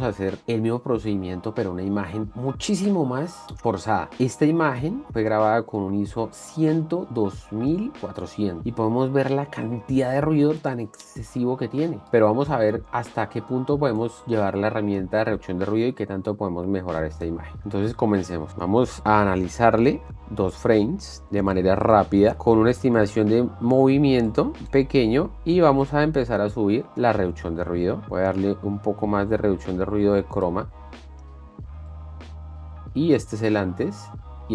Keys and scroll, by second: 11.5 space, 34.3 ctrl+d.